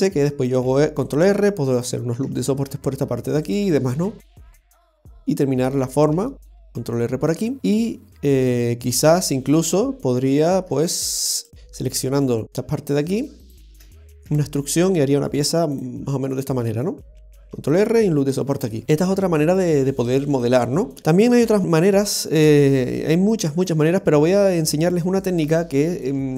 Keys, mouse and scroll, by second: 0.7 ctrl+r, 2.2 ctrl+r, 5.8-6.1 scroll down 1, 6.3 shift+middle click, 6.7 ctrl+r, 7.6 middle click, 10.3 right click, 10.8 alt+shift+right click, 10.9 right click, 11.4 alt+shift+right click, 11.5 alt+shift+right click, 13.4 alt+shift+right click, 14.3 e, 16.1-16.4 scroll down 2, 16.4 middle click, 17.4 ctrl+r, 18.8 middle click, 21.0 Tab, 21.0 scroll down 1, 21.4 middle click, 21.8 middle click, 22.4 KP_7, 23.1 scroll up 1, 23.9 Tab.